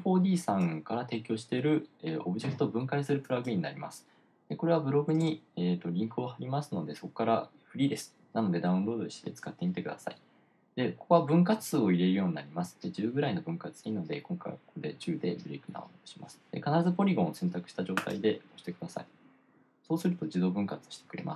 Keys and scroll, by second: 5.3-6.2 typing.